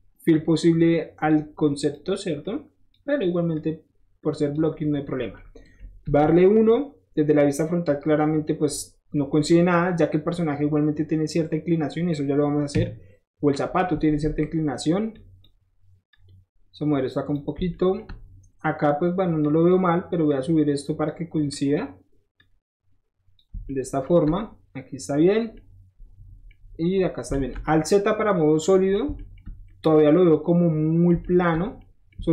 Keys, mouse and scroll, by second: 0.8 shift+click, 1.6 click, 2.4 click, 3.5 click, 4.7 middle click, 5.0 middle click, 6.1 KP_1, 9.3 middle click, 12.8 KP_3, 15.1 click, 16.0-17.3 drag, 17.6-19.4 shift+middle drag, 19.4 shift+drag, 19.7-20.2 shift+middle drag, 20.2-21.0 shift+drag, 21.0-21.4 middle drag, 21.4 drag, 21.7-22.3 middle drag, 22.3 click, 23.3-25.2 shift+middle drag, 25.4-26.7 shift+middle drag, 26.8-28.9 middle drag, 27.3 alt+z, 29.0-31.5 shift+middle drag, 31.8 shift+middle click, 32.2 shift+middle click.